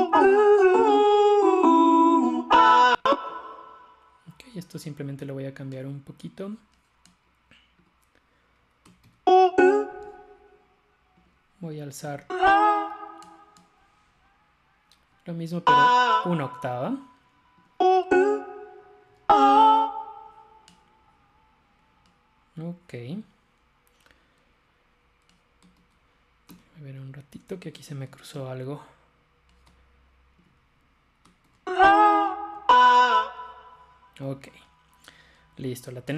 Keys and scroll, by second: 9.1 shift+Up, 12.2 shift+Up, 15.5 shift+Up, 19.1 shift+Up, 25.9 super+z, 26.5 super+z, 28.4 super+z, 31.5 shift+Up, 32.6 shift+Up.